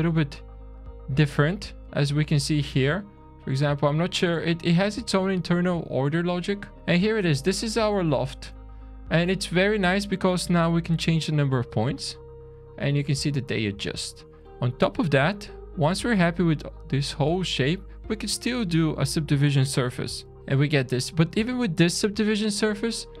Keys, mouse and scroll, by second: 0.2 Tab, 1.6 alt+click, 2.2-3.1 scroll down 2, 3.1 click, 4.7 alt+click, 5.8 click, 6.7 click, 6.7 shift+middle click, 8.7 alt+a, 9.6-10.0 scroll up 1, 10.0 middle click, 10.5 scroll down 1, 11.5 click, 11.9 click, 12.1 click, 12.3 click, 12.8-13.3 scroll up 2, 13.3 scroll down 3, 13.9 shift+middle click, 14.9 middle click, 15.6 middle click, 16.3 middle click, 17.1 click, 18.1 shift+a, 20.3 Down, 20.9 click, 20.9 scroll up 3, 21.9-22.3 scroll down 2, 22.7 shift+middle click.